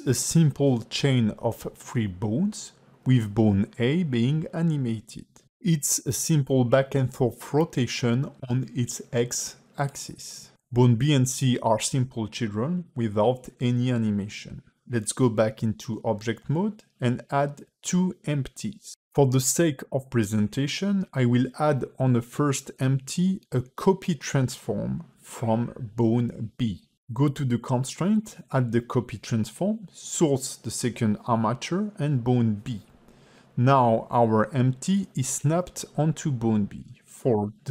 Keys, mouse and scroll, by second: 20.2 shift+middle click, 21.3 click, 22.1 ctrl+Tab, 22.5 click, 23.7 ctrl+Tab, 24.0 click, 25.6 click, 26.4 click, 29.8 click, 32.1 click, 35.6 click, 36.7 click.